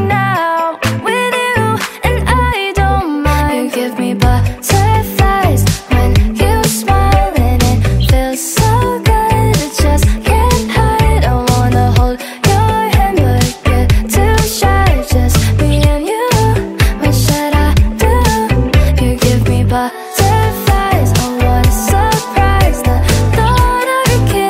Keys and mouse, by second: 0.4 click, 0.7 alt+click, 0.8 alt+right click, 0.9 click, 1.7 alt+middle click, 2.1 alt+click, 2.1 alt+middle click, 2.3 alt+click, 2.4 click, 2.5 alt+middle click, 2.5 alt+click, 2.7 click, 3.3 alt+click, 3.6 alt+click, 3.9 alt+click, 4.5 click, 8.0 click, 10.1 alt+right click, 10.2 alt+click, 11.0 click, 15.0 click, 16.9 click, 17.4 click, 18.5 alt+click, 18.7 click, 18.9 click, 19.2 alt+click, 19.5 click, 19.7 alt+click, 20.2 alt+right click, 20.4 alt+click, 20.5 click, 20.7 click, 20.8 alt+right click, 20.9 alt+click, 21.1 click, 22.9 alt+click, 23.2 click, 23.5 alt+click, 23.6 click.